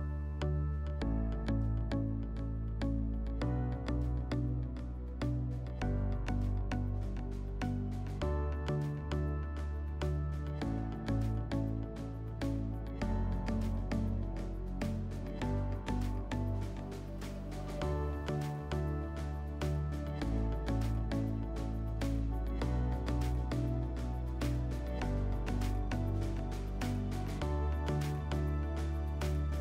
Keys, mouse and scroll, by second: 2.2 click, 5.0 click, 7.1-8.1 scroll, 8.1 t, 10.1-10.9 scroll, 10.9 s, 12.1 click, 13.6 click, 14.3 click, 16.7 click, 18.1 click, 18.8 right click, 19.5 p, 21.4 click, 22.4 scroll, 25.4 click, 26.8 click, 28.2 click.